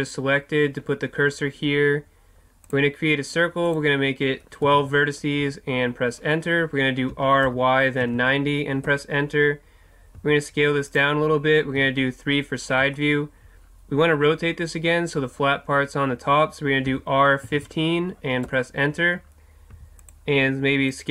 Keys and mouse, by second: 2.7-7.1 drag, 7.1 r, 10.2 s, 11.0 click, 11.8 KP_3, 16.9 r, 19.8 s, 20.1-21.1 drag.